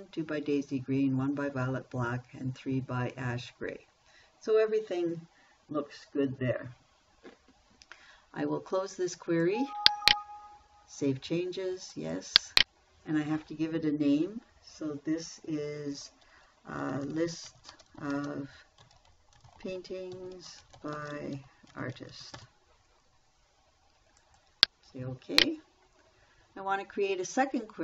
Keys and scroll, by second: 17.1-23.3 typing.